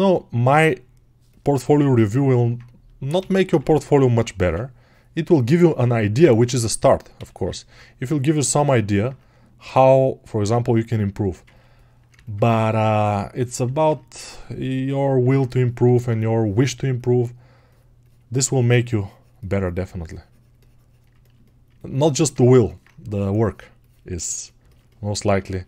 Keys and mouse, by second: 1.3-18.4 ctrl+right drag, 1.6 ctrl+r, 25.3-25.6 alt+shift+right drag.